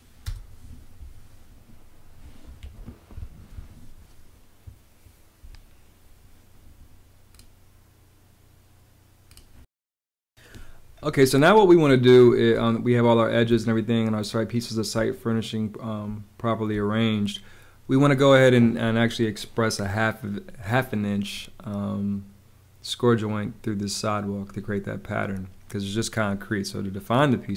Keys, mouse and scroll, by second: 2.4 space, 11.8 space, 13.4 space, 16.0 space.